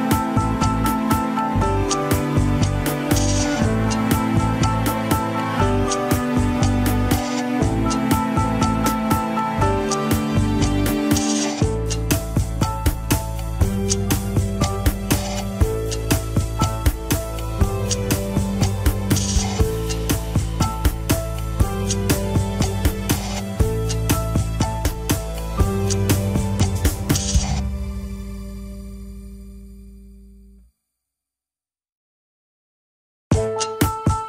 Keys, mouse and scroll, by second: 0.6 ctrl+click, 1.8 ctrl+click, 6.1-7.2 drag, 7.6-9.6 drag, 11.0-13.5 middle drag, 14.9 click, 15.6 scroll up 1, 16.1-18.3 drag, 18.3 ctrl+z, 18.5 click, 21.0-22.7 drag, 22.7 scroll down 2, 23.6 ctrl+click, 24.9-26.8 drag, 26.8 ctrl+z, 27.6 ctrl+click, 28.3 ctrl+click, 29.6 scroll down 4, 29.8-31.2 middle drag, 31.2-31.6 scroll up 4, 32.2 ctrl+click, 32.8 ctrl+click, 34.0 ctrl+click.